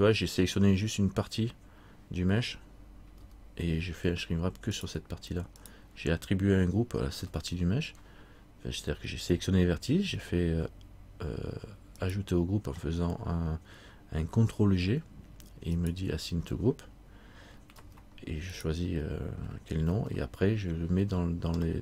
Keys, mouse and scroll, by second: 5.8 right click, 5.8 r, 7.3 r, 15.9 right click, 17.9 alt+r, 18.8 right click, 20.1 alt+r.